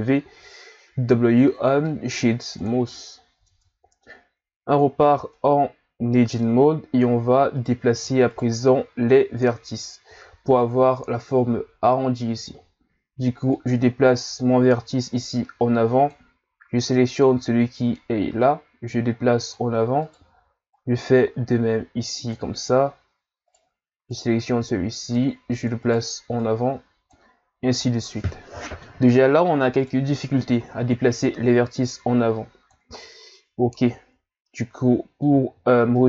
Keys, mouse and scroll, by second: 3.4 Tab, 5.3-6.7 middle drag, 6.7-7.6 scroll up 2, 7.6 right click, 8.3 shift+right click, 8.7 middle click, 9.1-9.8 scroll up 1, 9.8-12.9 scroll down 2, 13.5 click, 16.9 right click, 18.4 click, 20.0 right click, 20.7 click, 23.5 right click, 24.1 click, 25.8 right click, 26.3 click, 27.9-29.8 middle drag, 29.8 right click, 30.2-31.2 middle drag, 31.2 click, 33.0-36.0 middle drag.